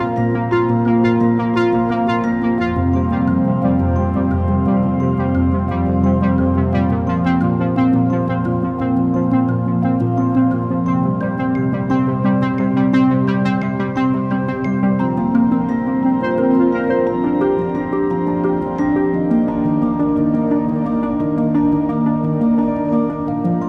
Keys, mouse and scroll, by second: 0.3 r, 8.2-10.9 drag, 10.9 i, 14.2 space, 18.4 space, 19.3-22.2 drag.